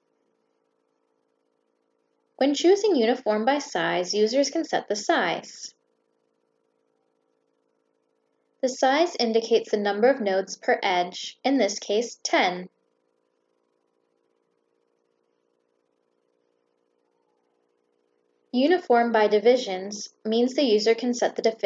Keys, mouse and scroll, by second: 2.4 click, 4.0 click, 8.1 click, 17.6 click, 18.9 click, 20.1 click.